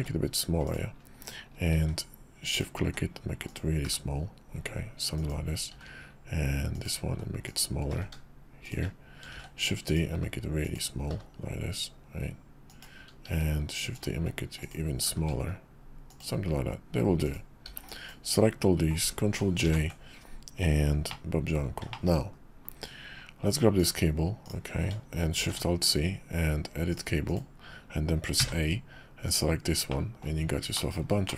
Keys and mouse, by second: 1.7 shift+d, 2.8 s, 3.8 g, 5.7 shift+d, 7.0 s, 7.9 g, 9.3 shift+d, 10.1 s, 11.1 g, 13.3 shift+d, 14.1 s, 15.0 g, 17.2 click, 17.6 b, 19.6 ctrl+j, 21.1-21.5 drag, 21.9 shift+drag, 22.3 KP_5, 23.1 KP_5, 23.8 click, 24.4 click, 25.4 alt+shift+c, 29.9-31.3 drag.